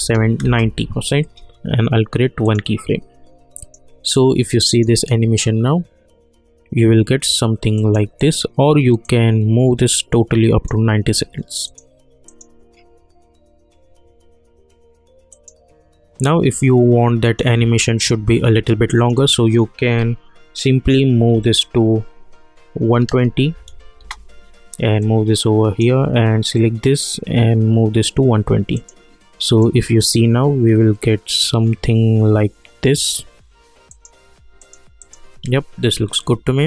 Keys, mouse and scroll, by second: 0.4 Return, 2.4 click, 7.7-11.6 drag, 15.3 click, 24.0 Return, 25.0-28.7 drag, 33.9 click.